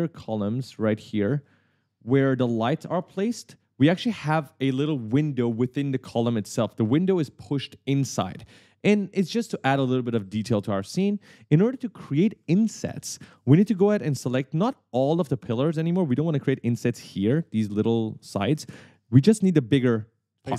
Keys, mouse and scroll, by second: 0.0 scroll down 1, 0.8 middle click, 1.9 middle click, 2.4 middle click, 2.6 scroll up 1, 3.2 middle click, 12.2 right click, 12.3 d, 13.0 w, 14.3 w, 15.2 click, 16.3 right click, 16.4 w, 18.4 click, 18.7 right click.